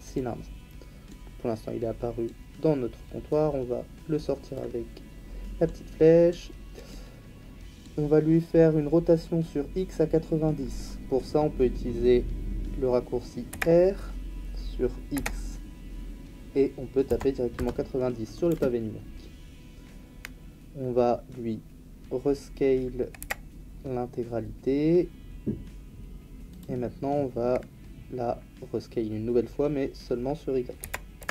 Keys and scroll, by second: 13.5 r, 15.1 x, 17.0 KP_9, 17.5 Insert, 18.5 Return, 23.2 s, 30.8 s, 31.2 y.